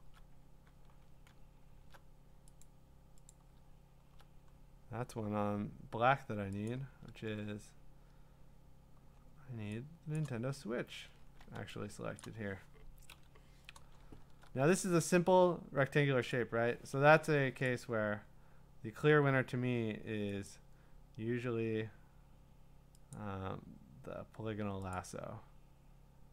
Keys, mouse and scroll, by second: 2.0 click, 2.0-2.4 scroll, 2.6 click, 3.3 click, 3.4-6.6 scroll down 17, 7.4-7.9 scroll down 3, 9.1-9.7 scroll down 1, 9.7 scroll down 1, 10.3 click, 10.3-11.2 scroll up 18, 11.9 scroll, 12.2 click, 13.1 i, 13.9 scroll, 14.0 scroll up 5, 16.3 click, 16.5-17.0 scroll, 17.0 Escape, 17.7 click, 20.5 click, 23.2 click, 25.0 click.